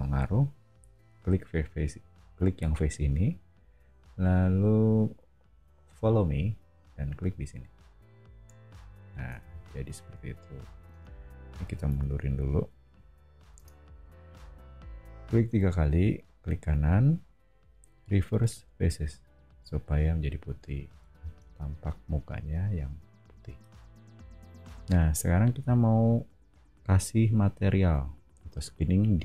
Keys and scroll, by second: 9.0 o, 10.9 space, 11.9 m, 13.5 space, 20.8 o.